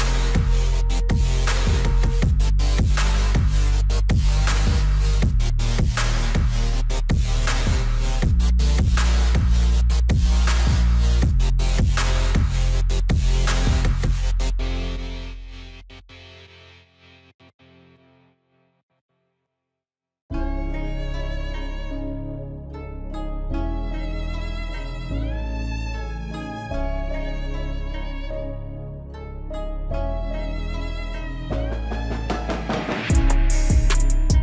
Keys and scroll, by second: 25.0 ctrl+z.